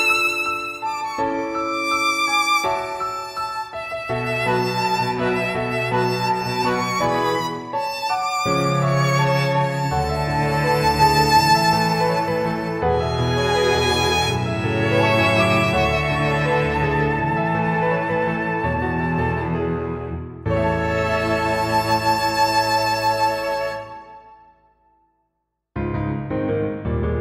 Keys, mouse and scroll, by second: 2.4 click, 7.6 click, 9.9 click, 10.2-12.3 scroll down 16, 12.3 click, 17.2 click, 18.2-18.9 scroll down 3, 19.0 middle click, 20.8 scroll up 2, 21.1 middle click, 26.3 click.